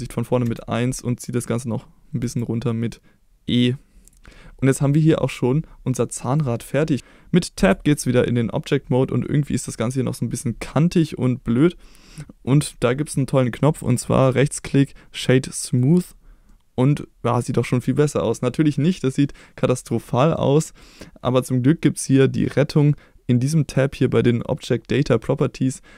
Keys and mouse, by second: 0.5 KP_1, 2.2 e, 4.0 click, 4.3 middle click, 5.4-6.5 middle drag, 7.6 Tab, 9.3-9.7 middle drag, 10.8-11.6 middle drag, 14.5 right click, 16.5-20.4 middle drag, 24.5 click.